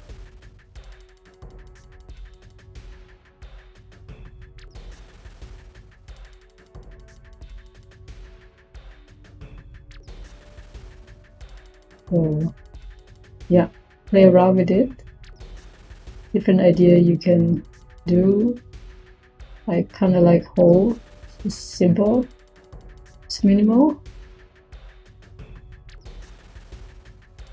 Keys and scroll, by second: 19.3-20.0 typing.